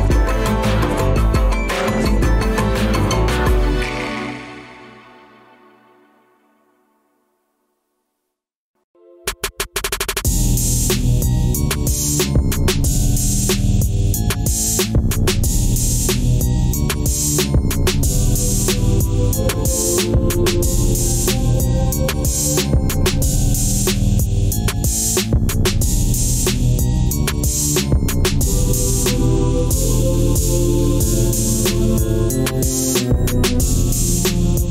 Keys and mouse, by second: 0.7-1.3 drag, 6.4 click, 30.9 click.